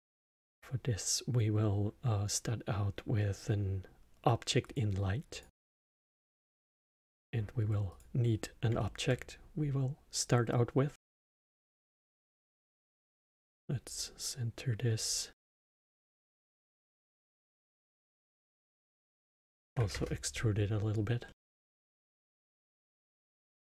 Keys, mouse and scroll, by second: 6.1 middle click, 6.9 shift+a, 8.7-11.1 alt+middle drag, 11.1 click, 12.4-16.9 drag, 17.0-21.2 drag, 21.2-22.1 middle drag, 22.1 Tab.